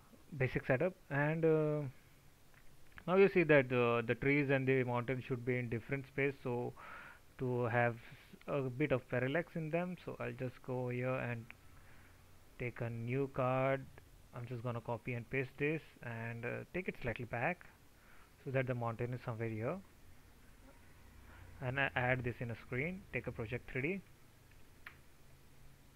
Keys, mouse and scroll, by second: 14.7 ctrl+c, 15.1 ctrl+v, 19.9 alt+t.